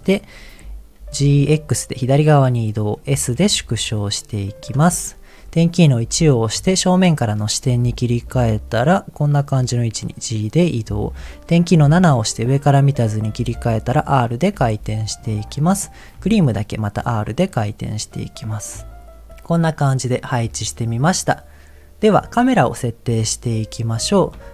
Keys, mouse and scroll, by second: 0.6 g, 1.1 x, 2.7 middle click, 3.5 s, 4.5 click, 6.0 KP_1, 7.1-7.6 scroll up 1, 7.6 g, 8.6 i, 10.5 click, 11.8 KP_7, 14.2 click, 14.5 g, 15.1 click, 15.7 click, 16.1 r, 20.2 click, 24.0 click, 24.4 shift+middle click.